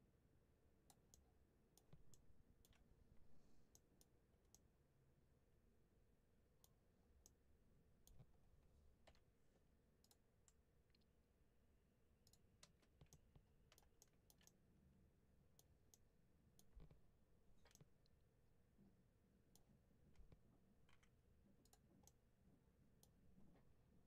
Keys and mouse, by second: 1.0 middle click, 3.6 middle click, 4.4-6.5 middle drag, 7.1 middle click, 13.0 middle click, 14.3-15.4 middle drag, 15.8 middle click, 17.6-19.4 middle drag, 20.8 2, 21.9 middle click.